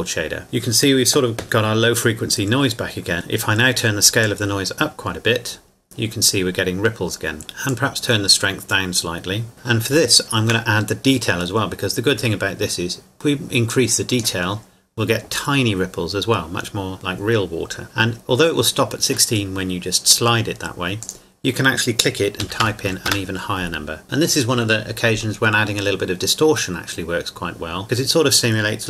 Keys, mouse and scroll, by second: 0.5 scroll up 1, 1.4 scroll down 1, 3.1 click, 4.1 click, 6.5-9.5 drag, 10.1-10.9 shift+middle drag, 10.9-13.4 scroll up 2, 13.7 click, 21.0 click, 22.4 KP_3, 22.6 KP_2, 23.1 KP_Enter.